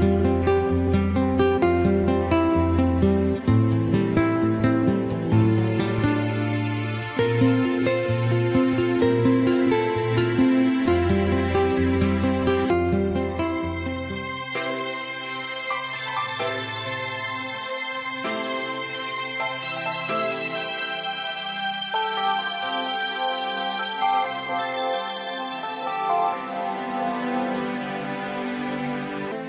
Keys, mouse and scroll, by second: 1.1 e, 9.5 middle click, 19.4 click, 23.0 middle click.